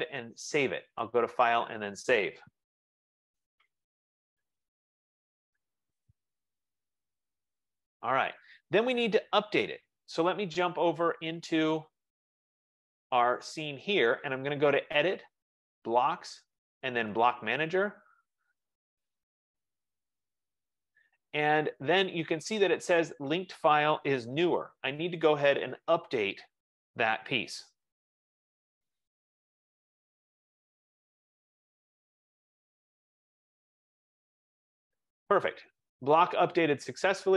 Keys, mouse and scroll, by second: 0.4 click, 1.9 click, 4.9 F15, 7.9 F15, 12.3 click, 16.1 click, 18.4 click, 23.0 click, 27.2 click.